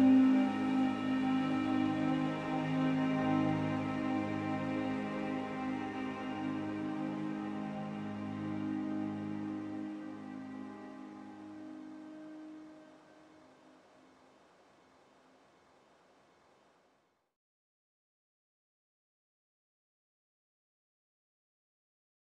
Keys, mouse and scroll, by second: 0.9-3.6 drag, 5.7 z, 6.4 click, 7.1 z, 8.1 z, 9.9-12.1 drag, 12.7 z, 12.9-13.6 scroll down 14, 13.6-16.5 drag, 18.5-22.3 drag.